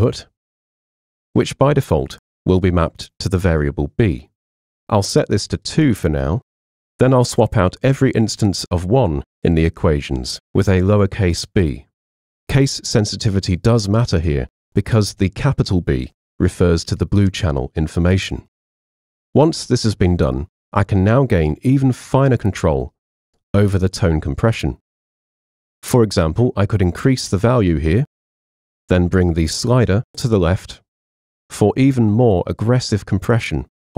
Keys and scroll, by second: 9.9 BackSpace, 11.3 b, 13.0-17.0 typing, 17.3 Return.